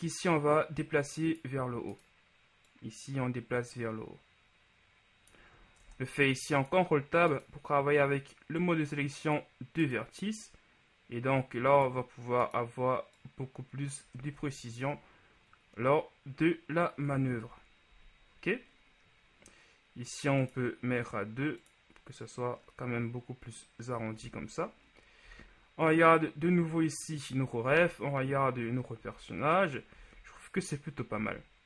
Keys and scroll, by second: 5.9 ctrl+Tab, 14.5 Tab, 17.5 KP_1, 24.3 a, 25.3 z, 27.9 z.